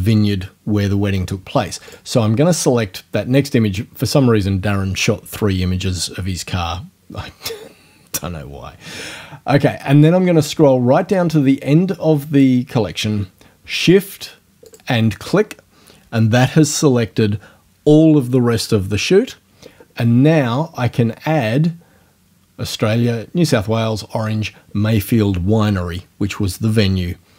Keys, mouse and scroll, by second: 1.9 click, 10.4-12.6 drag, 14.7 shift+click.